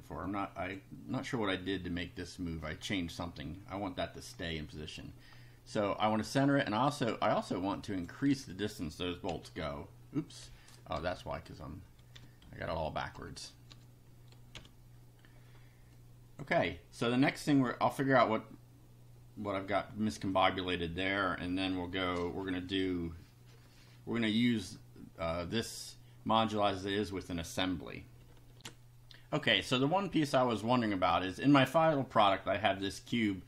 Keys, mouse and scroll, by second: 0.3 click, 3.2 scroll down 1, 4.6 click, 5.3 scroll up 1, 6.9 click, 7.8 click, 8.3 2, 9.3 F5, 11.0 BackSpace, 12.2 1, 12.4 Down, 12.7 Right, 13.2 Delete, 13.7 2, 14.5 F5, 16.0 click, 20.3 click, 28.6 ctrl+r.